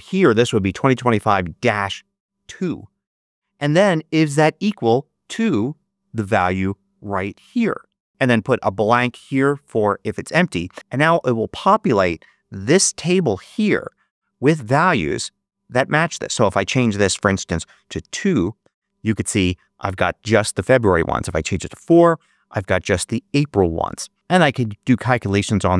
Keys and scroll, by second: 17.9 BackSpace, 18.0 2, 18.2 Return, 21.6 4, 21.8 Return.